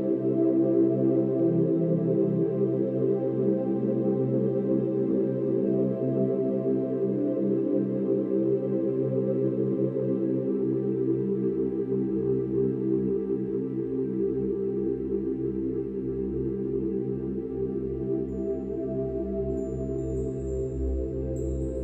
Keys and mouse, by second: 1.2 ctrl+z, 5.8-6.6 drag, 8.0-8.9 drag, 10.0-13.0 shift+drag, 13.2 shift+s, 14.4-15.3 drag, 17.7 g, 18.1 z, 20.4-21.3 shift+drag.